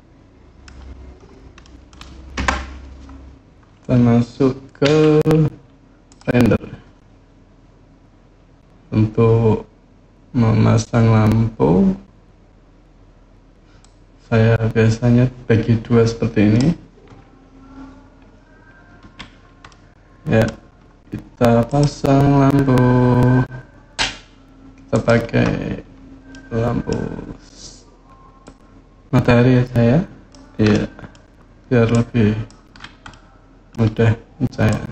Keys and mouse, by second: 1.4-1.7 middle drag, 2.1 KP_0, 4.6 z, 13.6-16.4 drag, 18.8 n, 19.5-20.2 middle drag, 21.5-24.9 drag, 26.1-26.7 middle drag, 28.3-30.1 drag, 30.6 middle drag, 31.7 click, 32.9-33.5 middle drag, 34.5 click.